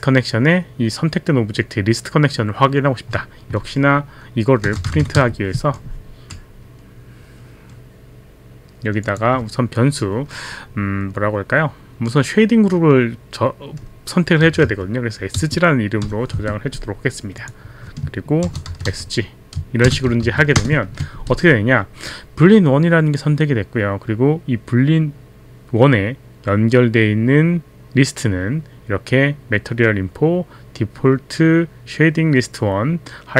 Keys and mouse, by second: 4.4-6.1 typing, 9.0 click, 14.2-16.3 typing, 18.2-20.4 typing, 20.6 ctrl+Return.